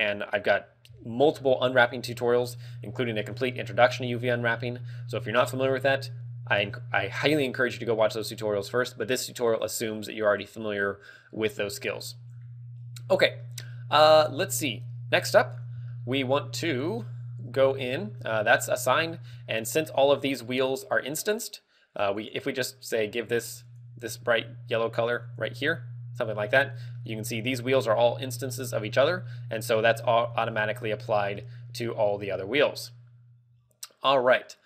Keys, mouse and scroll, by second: 1.8-2.6 scroll down 10, 2.7 middle click, 3.6 middle click, 4.3 scroll up 2, 5.0 a, 9.2-10.0 scroll down 2, 10.0 scroll down 1, 12.1-12.8 scroll down 6, 13.9 middle click, 16.3 shift+middle click, 17.8 shift+middle click, 18.2 shift+middle click, 20.3 shift+middle click, 22.2 click, 27.4 middle click, 29.3 a, 30.6 a, 31.5-32.1 scroll down 2, 32.0 middle click.